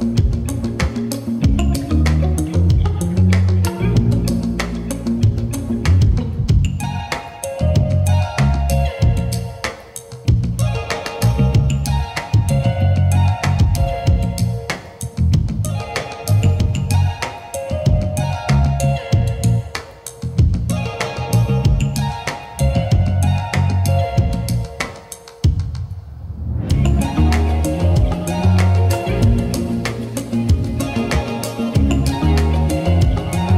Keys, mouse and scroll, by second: 0.0-2.2 drag, 5.0-5.4 drag, 5.7 g, 5.9 x, 8.8 click, 9.2 click, 10.5 g, 10.7 x, 12.2 click, 12.6 click, 14.2 g, 14.5 z, 15.8 click, 16.1 click, 16.6 shift+middle click, 17.2 middle click, 18.1-18.4 middle drag, 18.7 shift+middle drag, 19.1 middle click, 19.7 shift+middle click, 20.5 click, 21.9 click, 23.5 click, 23.7 click, 24.8 middle click, 25.7 click, 26.6 click, 26.9 click, 27.1 click, 27.4 click, 27.8-29.8 drag, 30.1 middle click, 31.1 click, 31.7 middle click, 32.6 click, 32.8 click, 33.0 click, 33.3 click, 33.5 click.